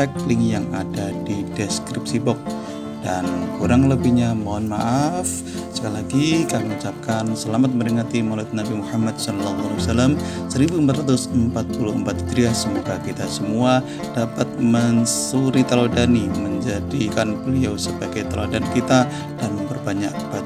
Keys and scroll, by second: 8.7 1.